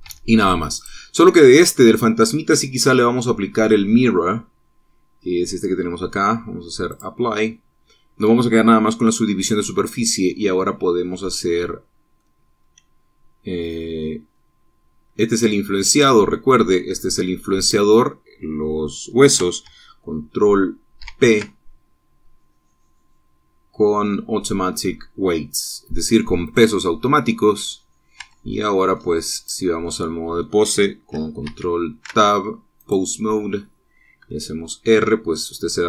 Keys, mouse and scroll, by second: 0.8 Tab, 1.5 click, 2.1-3.1 drag, 7.7 click, 11.4-13.1 drag, 18.4 shift+click, 21.8 ctrl+p, 27.3 click, 29.0 Tab, 29.3 middle click, 30.1 click, 30.6 middle click, 32.3 ctrl+Tab, 33.6 click, 35.0 r.